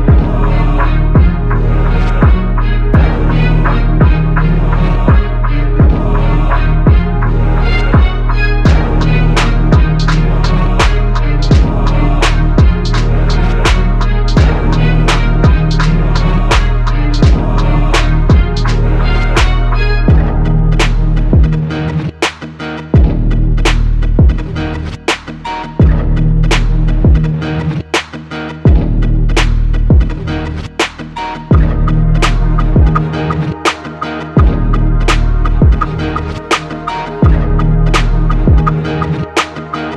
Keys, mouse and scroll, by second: 1.3 ctrl+r, 2.8 ctrl+r, 3.3 ctrl+r, 4.0 ctrl+r, 11.3 shift+right click, 16.0 i, 21.0 right click.